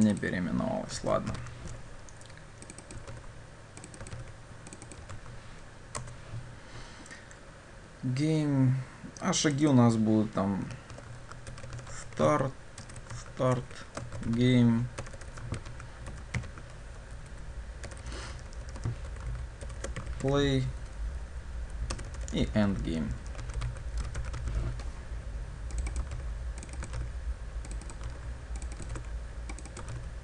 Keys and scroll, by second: 3.2 ctrl+c, 4.2 ctrl+v, 6.1 Return, 26.2 ctrl+c, 27.0 ctrl+v, 28.1 ctrl+c, 28.9 ctrl+v, 29.9 ctrl+c.